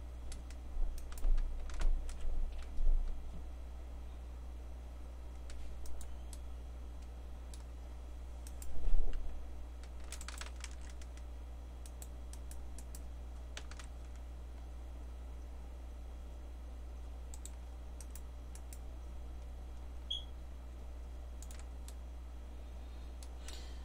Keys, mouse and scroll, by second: 2.1 g, 6.3-8.5 middle drag, 8.5 click, 9.1 g, 10.7 ctrl+z, 12.3-14.2 drag, 13.8 g, 14.8-17.1 middle drag, 18.0-20.3 drag, 20.3-22.1 middle drag.